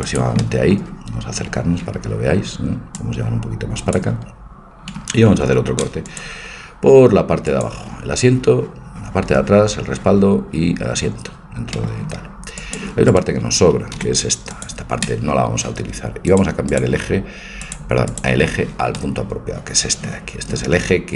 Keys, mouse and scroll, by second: 0.4-3.0 middle drag, 3.0-4.8 drag, 5.3 ctrl+r, 11.8-13.1 middle drag, 12.6 click, 13.1 right click, 13.9 Delete, 17.4-20.0 drag, 19.0-20.9 middle drag.